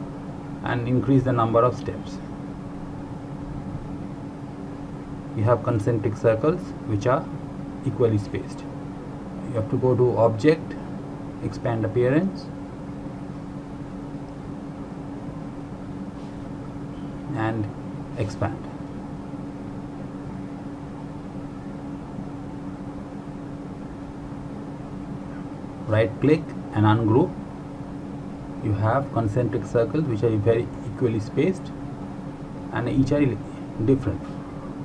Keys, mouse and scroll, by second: 0.7-3.3 scroll up 1, 7.7 click, 10.3 click, 19.1 click, 23.5 click, 26.6 right click, 27.7 click, 28.3 right click, 29.5 click.